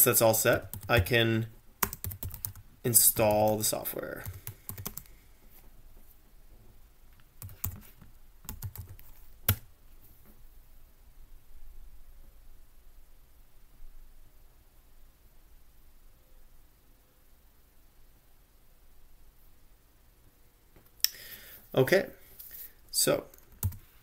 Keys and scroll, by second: 0.3-4.9 typing, 7.2-9.3 typing, 9.5 Return, 23.7 ctrl+l.